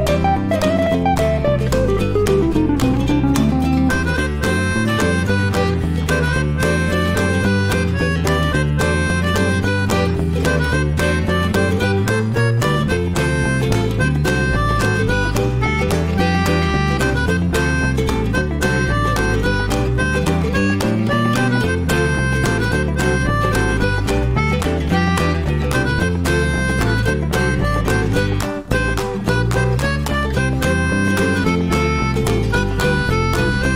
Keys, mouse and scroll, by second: 0.6 ctrl+shift+x, 16.7-21.6 middle drag, 21.9-29.5 middle drag, 29.8 alt+middle click, 31.0 alt+middle click, 31.2-31.6 scroll up 1, 31.6-32.7 shift+middle drag, 32.7 ctrl+shift+x.